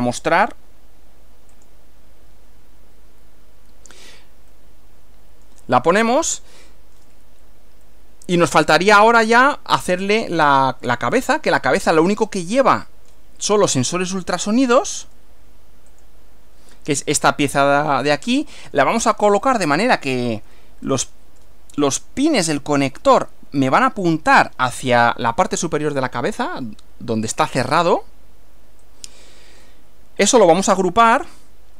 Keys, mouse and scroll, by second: 1.6 click, 4.5-5.7 middle drag, 6.1-7.2 shift+middle drag, 7.9-8.9 middle drag, 11.1-12.4 middle drag, 14.7 click, 15.1 right click, 16.0 click, 17.6-19.0 middle drag, 20.1-20.4 scroll up 1, 20.7-21.7 shift+middle drag, 27.5 scroll down 2, 28.9 click, 30.3 click, 30.7 right click.